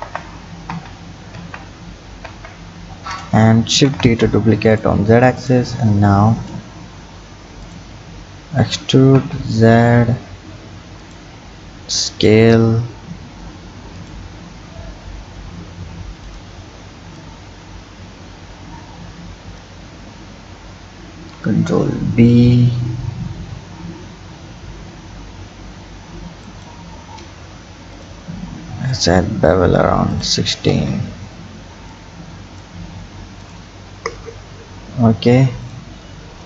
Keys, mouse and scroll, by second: 0.0 ctrl+z, 0.7 ctrl+z, 1.4 ctrl+z, 2.3 ctrl+z, 3.0 Tab, 3.7 shift+d, 5.4 click, 5.8 Tab, 6.1 scroll up 1, 7.6 click, 17.2-20.0 drag, 20.0 scroll down 2, 21.1 ctrl+b, 30.1 click, 30.7 Tab, 31.9 click, 33.4 click, 33.8-34.7 scroll down 4, 35.7 click.